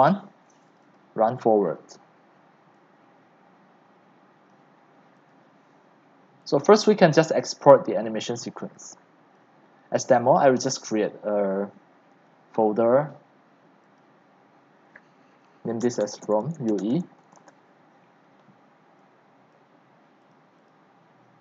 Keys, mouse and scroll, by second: 0.9 right click, 1.3 click, 2.9-4.0 drag, 4.5 alt+click, 8.7 click, 9.3-14.1 right drag, 15.6-17.3 typing, 17.4 Return, 19.6 click, 20.4 click, 21.0-21.4 drag.